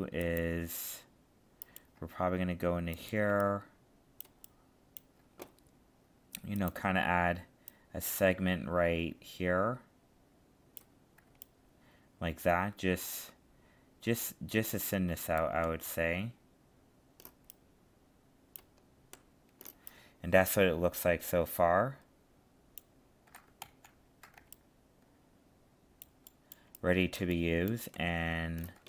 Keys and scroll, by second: 23.6 ctrl+z.